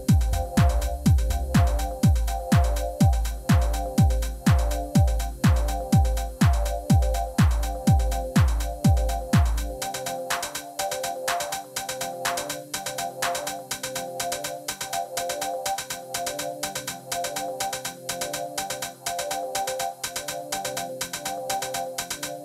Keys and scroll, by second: 1.7 u, 2.7 Tab, 7.5 shift+s, 12.2 shift+s, 13.8 shift+a, 14.8 g, 15.0 z, 15.7 Tab, 17.2 s, 18.2 s, 18.3 x, 20.6 s, 20.8 y, 22.1 3.